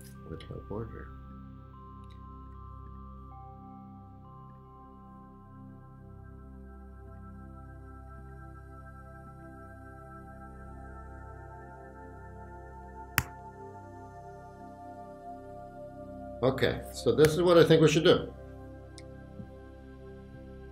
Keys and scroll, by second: 13.2 super+g, 17.3 super+0.